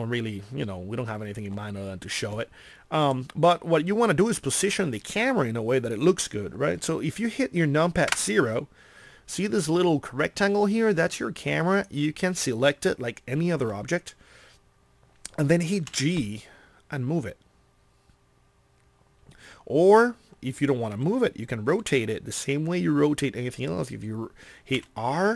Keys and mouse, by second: 8.1 KP_0, 16.0 g, 24.8 r.